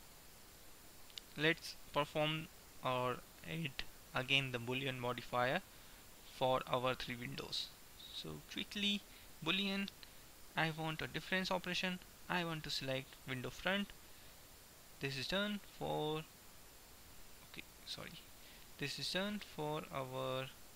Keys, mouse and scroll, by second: 0.3 middle click, 3.6-5.6 drag, 8.1-10.1 drag, 10.5-14.0 drag, 14.5-18.3 drag, 19.0-20.6 right drag, 20.0-20.7 drag.